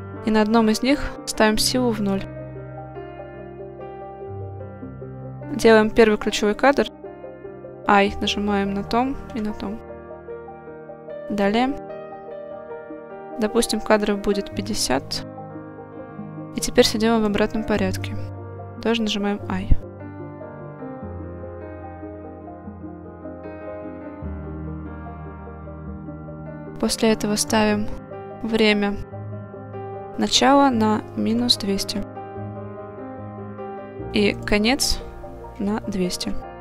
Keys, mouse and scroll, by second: 0.6-2.2 drag, 8.3 i, 9.4 i, 11.8-14.1 drag, 16.6 click, 18.1 click, 20.0 i, 24.1-26.2 drag, 27.5 click, 28.5-29.2 scroll down 1, 30.3-33.3 drag, 32.5 0, 34.4-36.6 drag, 36.3 0.